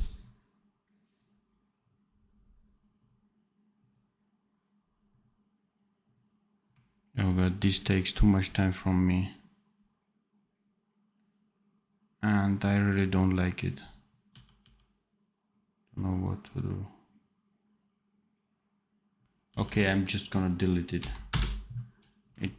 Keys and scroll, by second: 14.2 d, 19.4 d, 20.9 Delete.